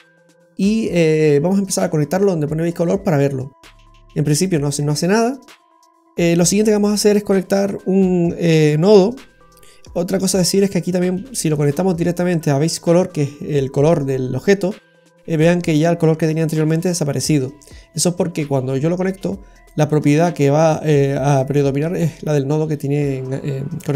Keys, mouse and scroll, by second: 1.4 click, 3.2 click, 4.8-5.8 scroll down 2, 5.0 middle click, 11.1 click, 14.9 middle click, 16.4 click, 18.5 click.